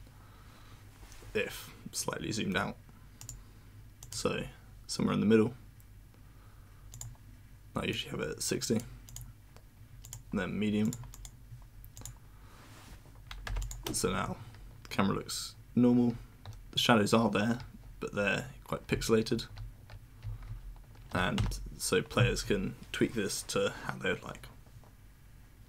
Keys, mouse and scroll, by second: 3.2 click, 4.0 click, 6.9 click, 7.9 click, 9.1 click, 10.0 click, 10.8 click, 11.1 click, 11.9 click, 13.6 click, 16.0 w, 17.5 w, 18.6-20.9 typing.